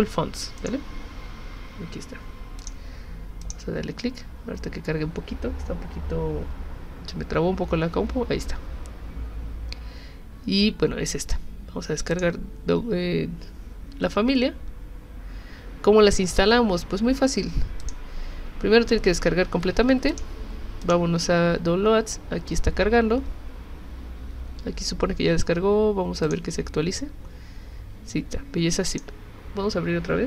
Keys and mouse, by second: 0.6 right click, 2.6 click, 3.4 click, 12.1 click, 17.8 click, 20.1 click, 20.8 click, 26.2 click, 28.9 click.